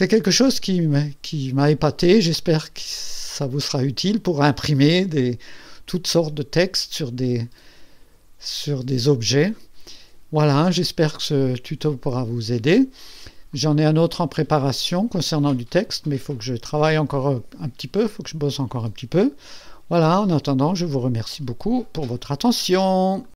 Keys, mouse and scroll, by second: 4.2-9.8 drag, 10.4-12.1 drag, 13.5-15.0 drag, 16.0-17.5 drag, 18.7 click.